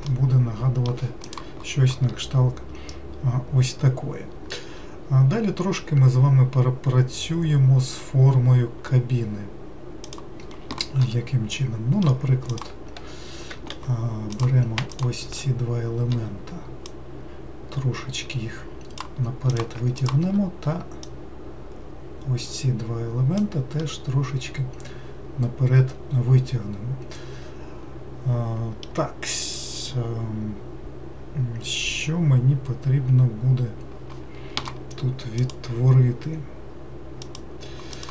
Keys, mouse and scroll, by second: 0.1-3.2 middle drag, 11.6 middle click, 12.5 click, 13.7 3, 14.3 click, 14.9 shift+click, 16.9 click, 19.5 click, 20.0 shift+click, 21.0 click, 23.8-26.8 middle drag.